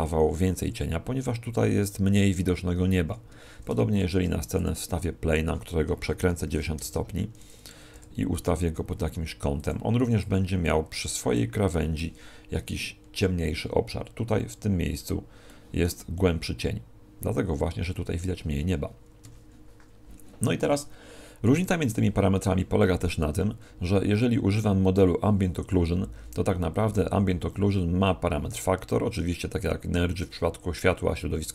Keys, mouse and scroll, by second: 3.3 Escape, 4.0 shift+a, 5.9 r, 8.0 r, 9.7 click, 19.2 Escape.